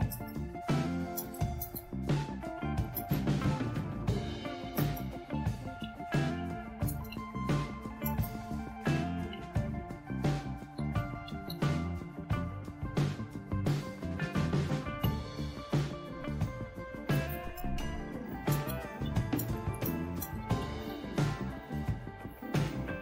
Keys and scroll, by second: 0.0-12.0 typing, 15.0 Return, 17.6-22.3 typing.